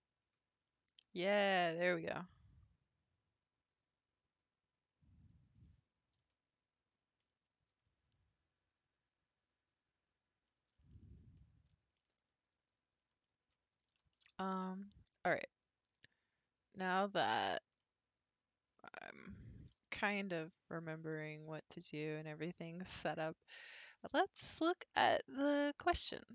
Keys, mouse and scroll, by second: 5.6-8.7 middle drag, 8.7 click, 10.5-10.9 scroll up 4, 10.9 shift+middle click, 11.8 shift+scroll up 1, 12.0 shift+middle click, 12.7 click, 13.2-13.5 scroll down 3, 13.5 middle click, 13.9 g, 17.8-19.4 middle drag, 19.4 r, 21.6-24.7 middle drag.